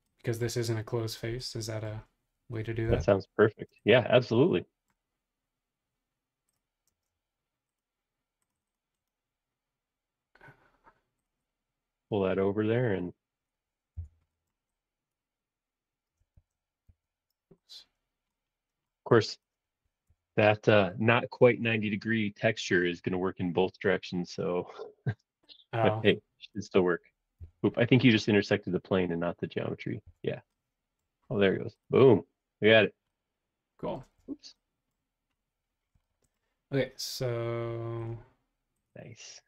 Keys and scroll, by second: 2.8 m, 6.9 space, 13.9 BackSpace, 16.4 shift+super+z, 16.9 super+z, 20.0 BackSpace, 22.8 BackSpace, 23.6 super+z, 27.4 BackSpace, 30.0 BackSpace, 34.0 space, 34.2 Escape.